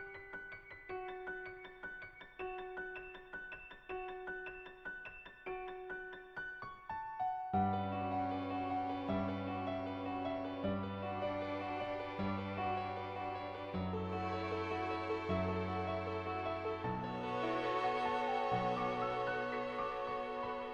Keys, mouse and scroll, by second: 1.3 click, 4.3 click, 5.2 click, 7.9-9.1 drag, 10.6 click, 13.9 middle click, 15.0 shift+click, 15.7 shift+click, 16.8 shift+click, 17.3 middle click, 18.2 click, 19.3 click, 19.6 click.